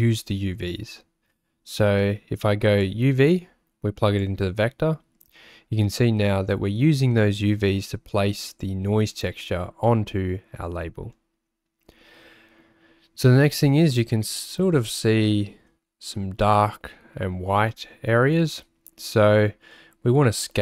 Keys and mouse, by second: 2.8 click, 3.0-4.4 drag, 8.5 click, 15.2 shift+middle click.